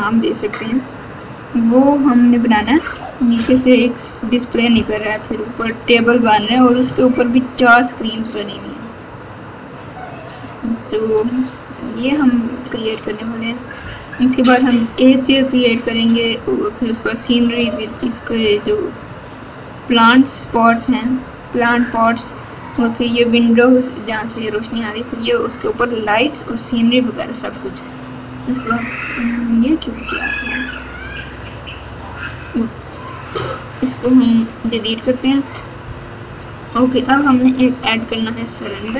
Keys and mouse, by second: 31.4 click, 32.9 click, 34.2 x, 36.2 KP_8, 37.6 KP_2, 38.7 KP_6.